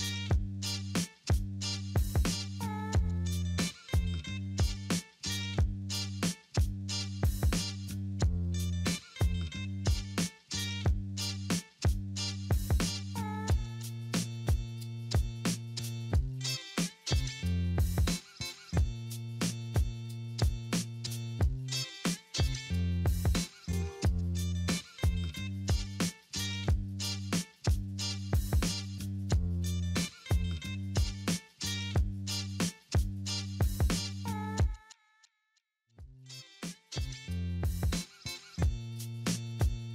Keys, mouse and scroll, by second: 10.2 middle click, 11.7 double click, 12.7 ctrl+right click, 22.0 right click, 23.0 right click, 23.0 right click, 36.3 double click, 39.5 shift+click.